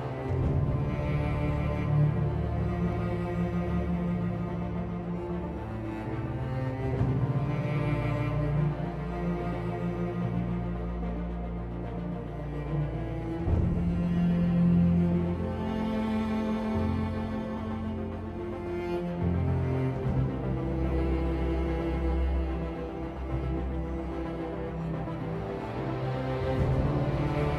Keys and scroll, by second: 0.0-1.2 typing, 2.7-3.8 typing, 5.3 r, 6.6 r, 13.0 r, 13.9 r, 17.5-18.3 typing, 19.6 r, 21.6 typing, 23.0-23.6 typing.